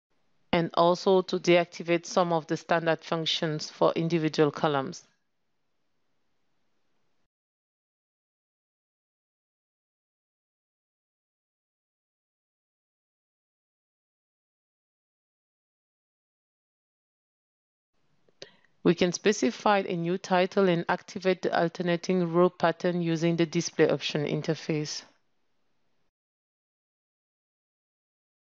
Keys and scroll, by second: 6.7 ctrl+space, 11.9 ctrl+space, 23.2 ctrl+space.